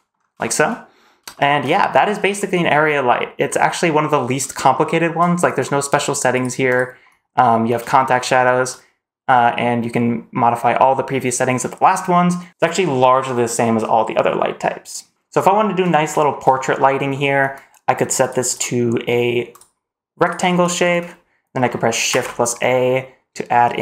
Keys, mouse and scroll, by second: 0.1 scroll down 1, 0.3 shift+middle drag, 1.2 shift+middle drag, 4.6-5.0 shift+middle drag, 6.2 click, 6.6 click, 7.9 shift+middle click, 15.1 shift+middle drag, 15.1 scroll down 1, 16.0 shift+middle click, 16.4-16.7 scroll up 1, 16.7 middle drag, 17.0-17.4 scroll down 1, 18.1 click, 18.4-19.5 drag, 20.1-20.6 drag, 21.6 middle click, 22.0 shift+a.